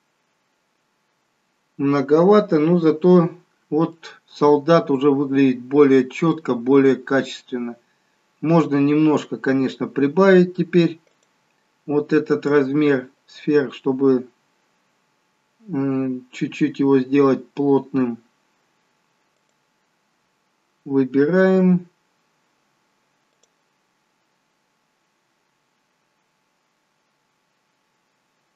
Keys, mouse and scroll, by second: 2.4 scroll down 1, 3.6 scroll down 1, 4.3 scroll down 1, 4.5 middle click, 8.7 scroll down 2, 11.8 click, 11.8 scroll down 6, 17.0 click, 20.1 click, 25.1 scroll down 3, 27.8 click.